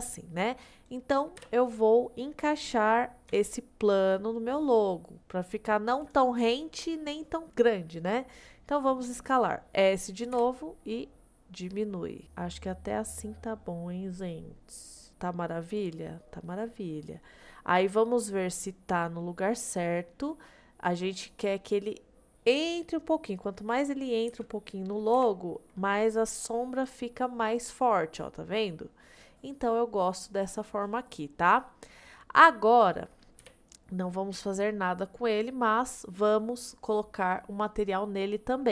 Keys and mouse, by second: 0.7 click, 1.4 KP_1, 3.3 g, 10.4 s, 16.4-17.5 middle drag, 18.3-22.4 middle drag, 23.1 middle click, 24.3 g, 25.2 y, 27.2-31.4 middle drag, 31.8 middle click, 32.4 middle click, 33.4 KP_1.